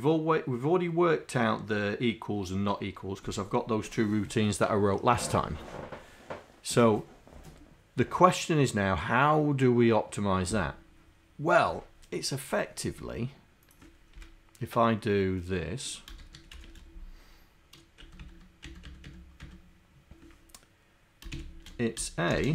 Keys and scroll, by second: 14.2 Return, 16.0-17.1 typing, 18.0 Tab, 18.2 Tab, 18.9 Tab, 19.4 Tab, 21.4 shift+a, 22.4 shift+0.